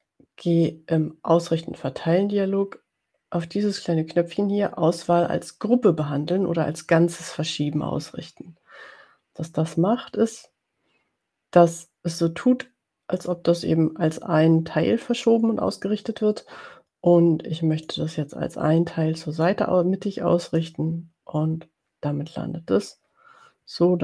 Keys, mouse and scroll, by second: 13.2 click, 17.9-19.9 drag, 20.6 click.